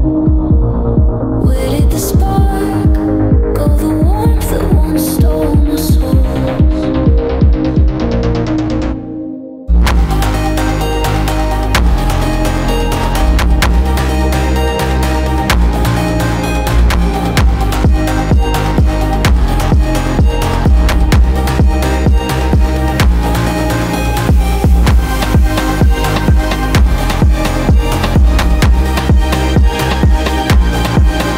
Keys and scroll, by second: 14.5 ctrl+z.